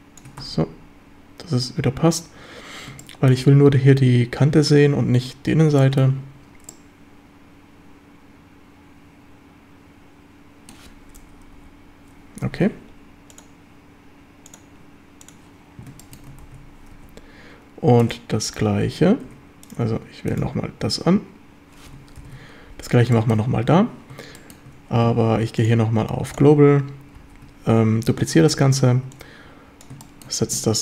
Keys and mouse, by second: 1.1 Tab, 3.0-3.3 shift+middle drag, 5.8 shift+middle drag, 6.7-10.7 middle drag, 13.5 KP_7, 13.5-15.4 drag, 16.0 shift+middle drag, 16.5 ctrl+s, 17.0 z, 19.3 Tab, 20.8 Tab, 22.2 ctrl+l, 23.1 shift+drag, 24.4 shift+click, 25.7-26.6 drag, 27.2 shift+d, 28.6 Escape, 29.1 click, 30.0 shift+middle click.